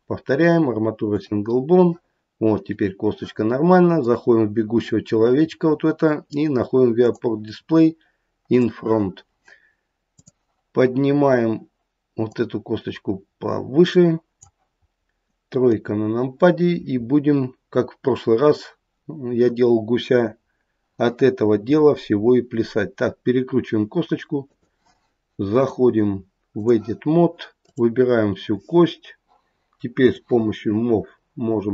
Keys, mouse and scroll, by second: 4.0 click, 6.9 click, 8.6 click, 10.2 click, 12.2 click, 15.7 KP_3, 21.5 r, 25.5 click, 27.7 click, 30.1 click.